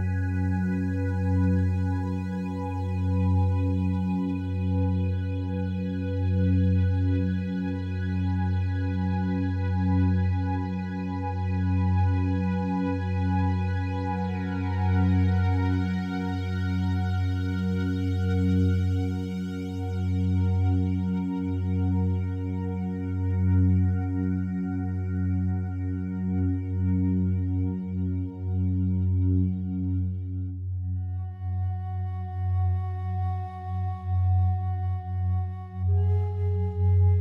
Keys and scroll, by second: 16.1 Return, 25.1 F9, 36.5 Escape.